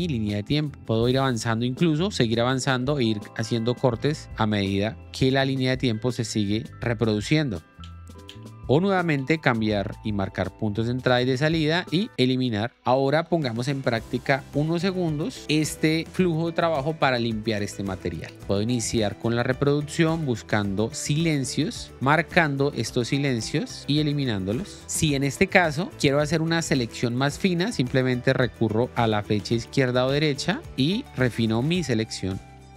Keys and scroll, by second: 0.2 k, 0.7 l, 1.7 ctrl+b, 2.7 ctrl+b, 3.7 ctrl+b, 6.4 ctrl+b, 6.7 k, 7.8 Up, 8.7 i, 9.2 Down, 9.9 o, 12.0 Delete, 18.9 l, 21.6-24.8 typing, 29.6 Right, 29.9 Left, 30.1 Right, 30.4 Left, 30.7 i, 31.9-32.7 typing.